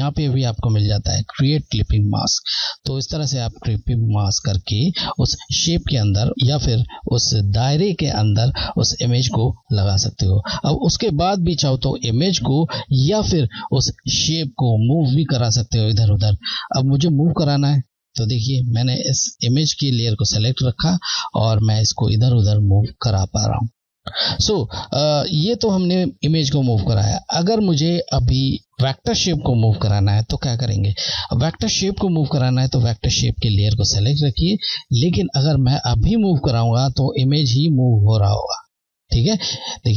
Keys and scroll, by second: 2.3 Left, 2.3-2.6 typing, 17.6 Left, 33.1 Left, 35.6 typing, 37.6 Left.